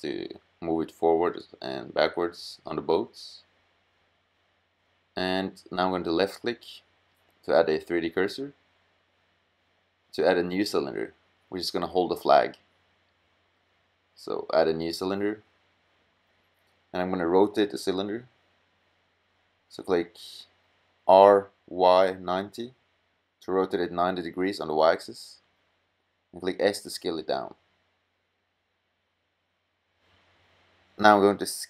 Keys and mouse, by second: 1.4-2.3 middle drag, 9.4 middle drag, 10.7 middle click, 11.5 middle click, 20.0 r, 23.3 s, 29.1-29.7 middle drag, 29.8 middle drag, 30.2 middle click, 30.3 middle click, 30.6 middle click.